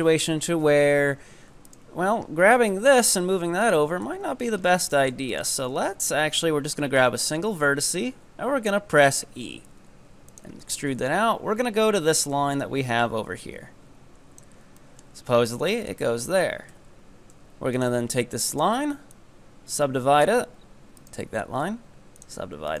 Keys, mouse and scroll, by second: 0.3 scroll down 4, 1.7 ctrl+right click, 2.5 e, 4.1 ctrl+z, 4.7 scroll up 2, 5.0 shift+middle click, 5.4 right click, 7.8 e, 10.9 KP_7, 12.3-14.8 drag, 14.8-15.9 shift+middle drag, 15.9 ctrl+right click, 16.7 w, 18.5 right drag, 19.2-21.0 drag, 21.0 ctrl+right click, 21.6 w, 22.7 right click.